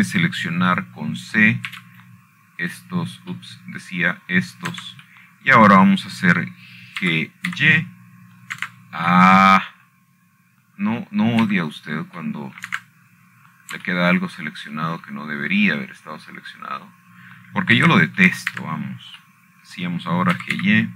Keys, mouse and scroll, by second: 0.9 shift+middle click, 2.0-3.1 shift+middle drag, 4.1 middle click, 4.4 c, 4.8-7.1 drag, 7.5 Escape, 8.8 middle click, 9.7 g, 10.2 y, 11.3 Escape, 11.4 º, 12.6 middle click, 14.2 c, 15.3 middle click, 15.4 Escape, 15.4 º, 16.0-17.0 scroll up 3, 17.6 shift+middle click, 18.0 scroll down 2, 18.2-19.2 scroll up 4, 19.2 scroll down 1, 20.5 c.